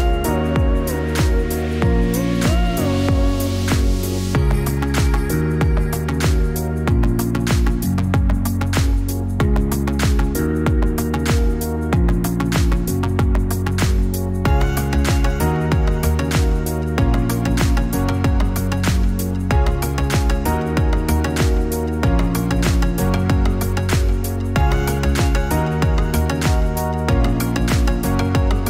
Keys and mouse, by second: 10.0 Tab, 15.3 a, 21.7 click, 24.3-28.6 drag, 26.2 BackSpace, 26.9 BackSpace.